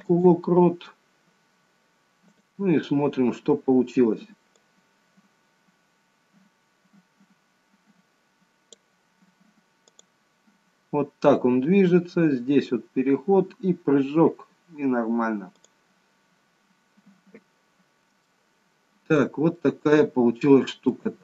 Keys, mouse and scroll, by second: 2.3 click, 3.1-4.4 scroll down 1, 4.4 scroll down 2, 4.5 click, 9.8 click, 15.5 click, 16.3-18.1 scroll up 2, 18.1-18.5 scroll up 2, 18.5 shift+middle click, 19.5 middle click.